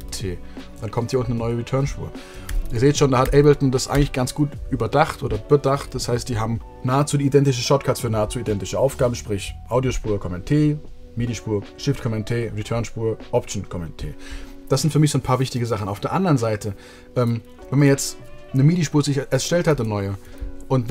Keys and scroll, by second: 2.1 super+z, 2.8 super+z, 3.5 super+z.